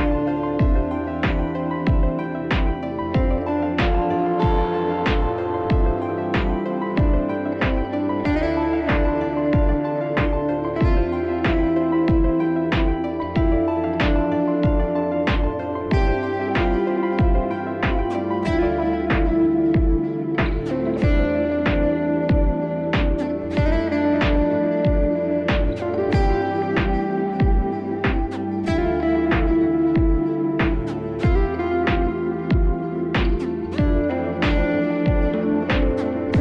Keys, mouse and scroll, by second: 3.0 [, 4.0 click, 4.9 click, 5.5 click, 5.6 click, 5.9 click, 6.1 click, 6.1 click, 6.3 click, 6.4-8.3 click, 6.6 click, 8.5 click, 8.6 click, 8.8 click, 8.9 click, 9.0 click, 9.1 click, 9.2 click, 9.4 ], 9.6 click, 9.6 ], 9.7-10.3 click, 10.0 click, 10.1 click, 10.5 click, 10.6-11.4 click, 10.8 click, 10.9 click, 11.0 click, 11.7 click, 11.8 click, 11.9-12.5 click, 12.1 click, 12.1 click, 12.2 click, 12.9 click, 13.1 click, 13.1 click, 13.2 click, 13.6 click, 13.6 [, 13.7 [, 14.1 click, 14.1 click, 14.4 click, 14.7 click, 14.8 click, 14.9 click, 15.0 click, 15.1 click, 15.3-15.8 click, 15.5 click, 15.6 click, 16.1 click, 16.2 click, 16.3 click, 16.4 click, 16.9-17.3 click, 17.0 click, 17.1 click, 17.2 click, 17.7-19.7 ], 19.7 [, 19.7 [, 21.6 click, 22.3 click, 23.1 click, 23.8 click, 27.0 click, 27.7 click, 28.4 click, 29.1 click, 29.5 click, 29.7 click, 31.1 click, 31.5 click, 31.8 click, 32.3 click, 32.6 click, 33.2 click, 33.3 click, 33.4 click, 33.6 click, 34.2 click, 34.3 click, 34.9 alt+scroll, 36.3 click, 36.3 click.